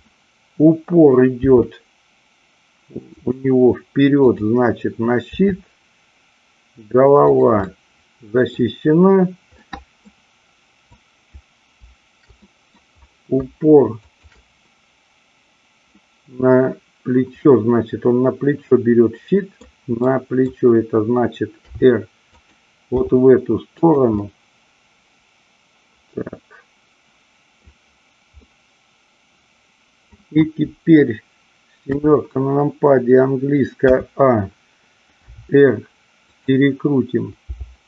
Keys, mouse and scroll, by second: 1.4 r, 3.1 click, 7.6-8.5 middle drag, 9.6-10.0 middle drag, 11.0-11.4 drag, 12.4-12.7 middle drag, 14.0-15.5 shift+drag, 16.0-19.6 middle drag, 19.9 middle click, 21.6 r, 22.4 click, 22.9 g, 23.7 click, 24.3-27.6 middle drag, 28.4-30.1 middle drag, 31.7 KP_7, 34.0 a, 35.3 r, 36.4 click, 37.5 g.